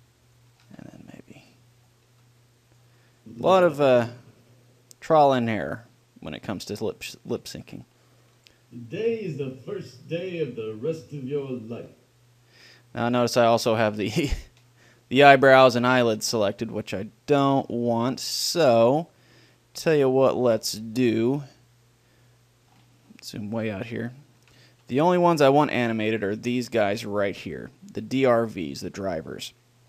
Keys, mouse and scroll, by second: 0.8 a, 1.0 b, 2.3 g, 3.0-5.2 drag, 7.6-10.2 drag, 13.4-15.1 drag, 15.1-16.4 middle drag, 17.0-19.0 middle drag, 19.3-21.1 middle drag, 21.9 middle click, 24.7 a, 25.0 b.